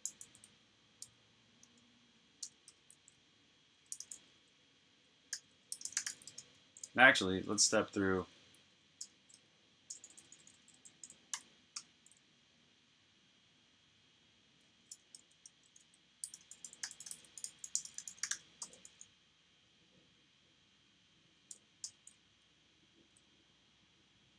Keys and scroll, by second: 0.0-2.2 typing, 3.8-6.8 typing, 9.6-11.2 typing, 11.6 Return, 14.6-18.7 typing, 21.4 n, 21.7 Return.